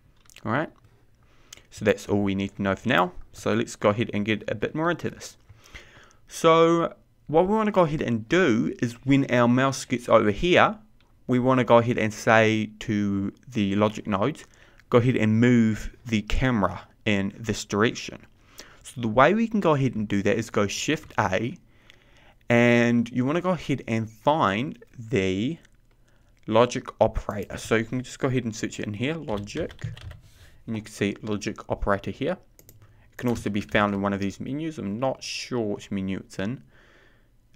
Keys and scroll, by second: 22.6 shift+a.